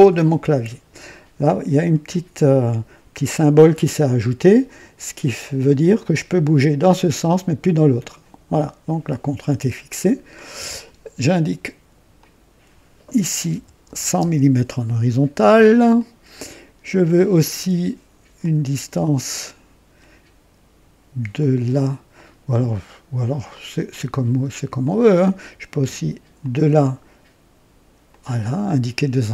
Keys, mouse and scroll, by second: 5.9-9.0 drag, 10.3 click, 12.1 click, 13.4 KP_1, 13.8 KP_0, 14.0 KP_0, 14.1 KP_0, 15.9 click, 18.3-20.1 drag, 21.3 click, 22.1 click, 23.5 click, 24.8-25.4 drag, 26.3 click, 28.0 click.